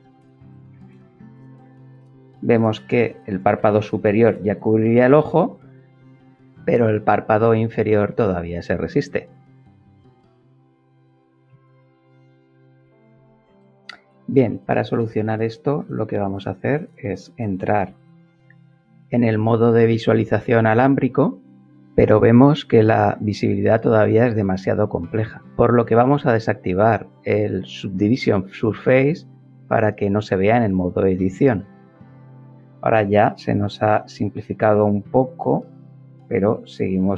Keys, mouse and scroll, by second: 1.1 shift+middle click, 1.5-2.8 shift+middle drag, 3.5-4.9 shift+middle drag, 5.2 shift+middle click, 6.0-7.2 shift+middle drag, 17.8 z, 19.4 click, 26.7 click, 31.4 middle click.